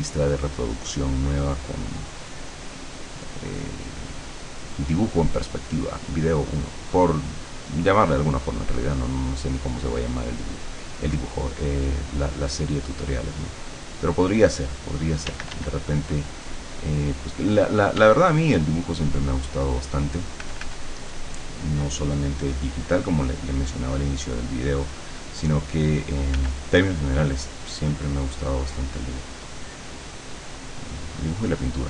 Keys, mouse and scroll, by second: 1.0-14.1 drag, 15.3 d, 16.0-17.6 drag, 18.0 d, 18.4-20.0 drag, 20.5 f, 21.0-26.5 drag, 26.4 f, 26.9-29.5 drag.